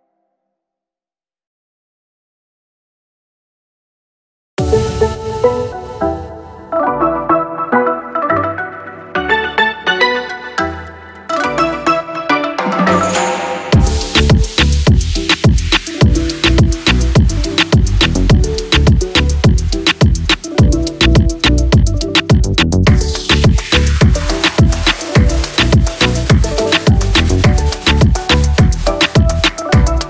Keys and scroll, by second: 13.9 ctrl+[, 25.0 ctrl+-.